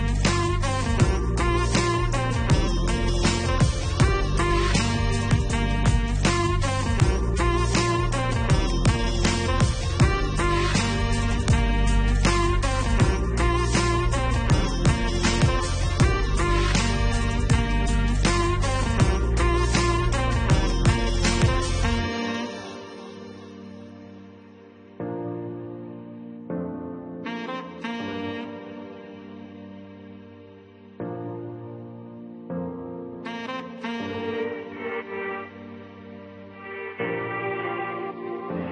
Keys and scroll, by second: 33.7 2, 34.2 5, 34.9 0, 35.9 Return.